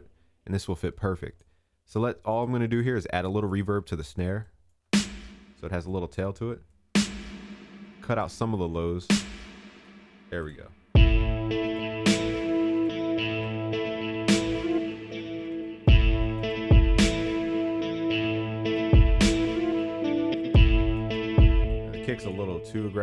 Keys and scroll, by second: 15.4 ctrl+s.